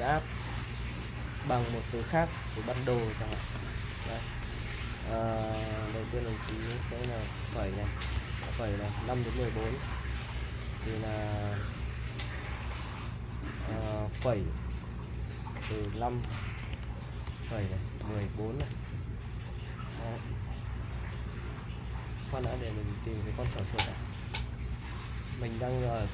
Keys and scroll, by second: 3.5 shift+;, 4.4 BackSpace, 6.8 shift+;, 8.1 ,, 15.1 BackSpace, 16.2-18.6 typing, 22.4-24.8 typing.